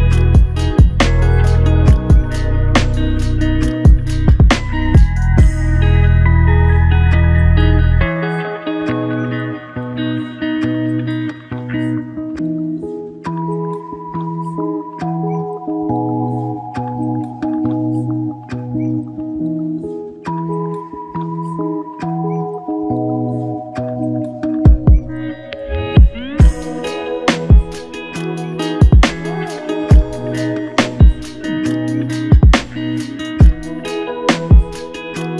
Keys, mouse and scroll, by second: 0.6 alt+shift+click, 2.4-3.2 typing, 14.0 double click, 22.2 double click, 24.6 double click, 26.8-27.2 typing, 30.6 double click.